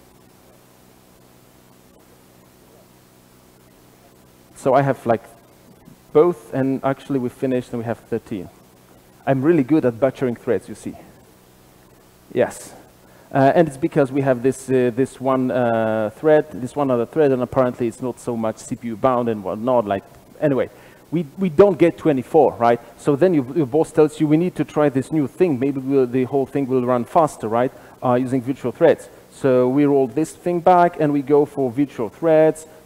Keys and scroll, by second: 29.1 alt+super+z.